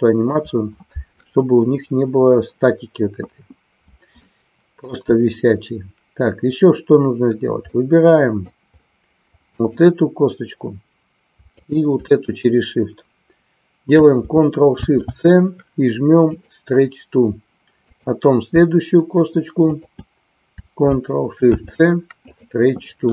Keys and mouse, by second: 4.2 shift+middle click, 7.7 middle click, 11.5-12.6 shift+drag, 19.6-20.7 shift+drag, 22.4 ctrl+shift+c.